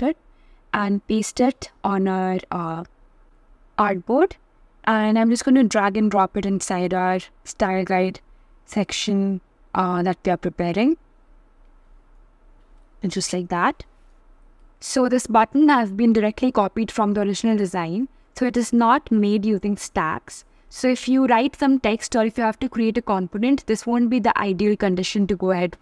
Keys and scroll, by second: 0.1 super+v.